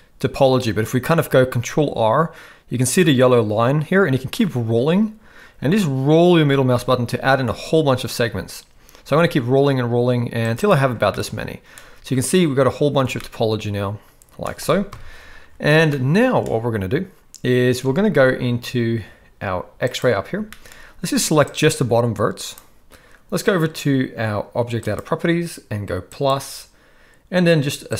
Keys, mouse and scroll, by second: 11.1-11.7 middle drag, 13.3-14.5 shift+middle drag, 14.9 KP_1, 16.0-16.5 shift+middle drag, 17.8 alt+a, 19.9 click, 20.5 shift+middle click, 21.4-22.5 drag, 24.8 click, 26.2 click, 27.9 click.